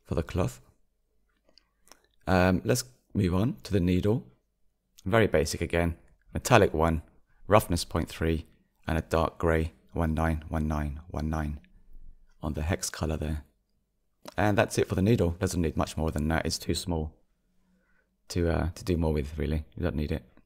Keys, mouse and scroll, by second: 0.0 click, 5.7 drag, 6.1-16.2 middle drag, 16.2 click, 16.4-16.8 scroll down 4, 16.8-20.4 middle drag.